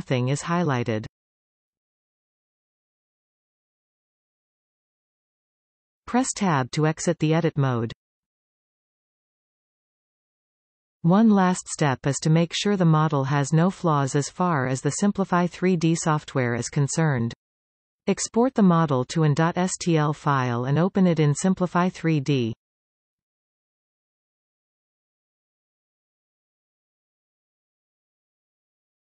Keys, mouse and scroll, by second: 3.1 z, 6.9 Tab, 8.4-11.4 middle drag, 12.9-15.9 drag.